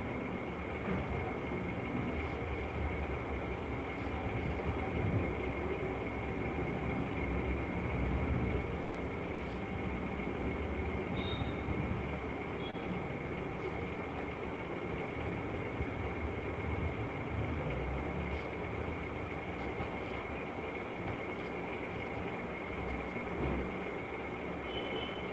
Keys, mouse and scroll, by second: 1.7 shift+click, 3.5 click, 3.7 alt+click, 4.5 [, 4.7 [, 4.9 [, 5.7 click, 5.9 click, 8.2 click, 8.8 click, 9.2 click, 9.6 click, 9.8 right click, 9.8 click, 10.2 click, 10.4 click, 10.8 click, 11.5 click, 11.9 click, 12.1 click, 12.5 click, 12.9 click, 14.3 click, 14.9-15.2 alt+click, 15.3 click, 16.5 middle click, 16.5 click, 16.9 click, 17.1 click, 17.5 click, 17.9 click, 18.5 click, 21.2-22.2 alt+click, 23.4 click, 23.8 click, 24.9 click.